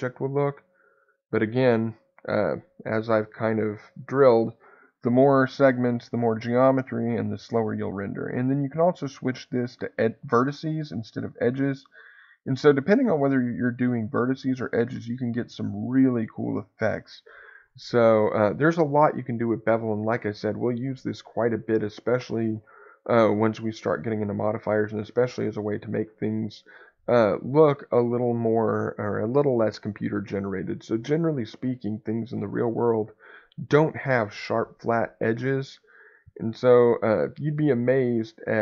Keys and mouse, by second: 8.5 click, 13.7 click, 16.0 click, 17.5 click.